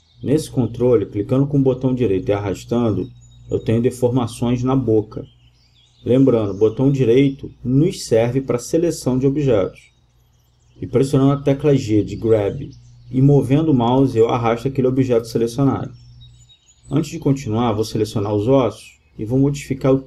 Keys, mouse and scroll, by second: 6.2-7.9 right drag, 8.4 g, 16.2-18.7 drag.